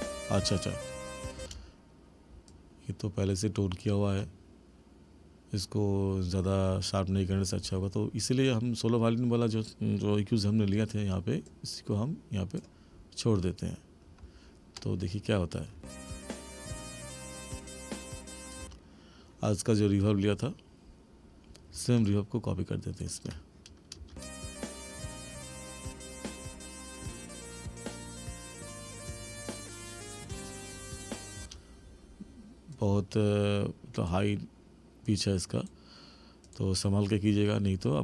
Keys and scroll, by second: 1.4 space, 15.8 space, 18.6 space, 24.0 space, 31.5 space.